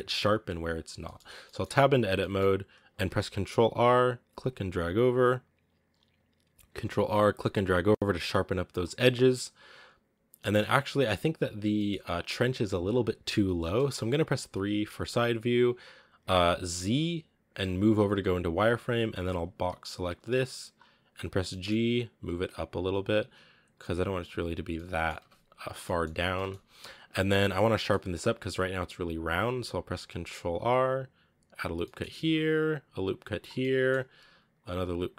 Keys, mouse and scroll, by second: 0.7 scroll down 2, 0.9-1.3 middle drag, 1.3 scroll up 1, 1.4 middle click, 1.6 Tab, 2.1 middle click, 2.9 ctrl+r, 6.7 ctrl+r, 8.8-10.3 middle drag, 10.3 scroll down 1, 10.4-14.2 middle drag, 14.2 KP_3, 14.9-15.4 scroll up 4, 15.4 a, 16.8 z, 17.9 z, 20.6 b, 21.0 g, 24.2 z, 24.3 scroll down 2, 24.6 middle click, 25.0 Tab, 25.5 scroll down 1, 25.7-26.9 middle drag, 26.9 Tab, 27.7-29.4 middle drag, 29.4 ctrl+r, 31.7 middle click, 32.0 ctrl+r, 33.4 scroll down 1, 33.4 middle click, 34.0 ctrl+r.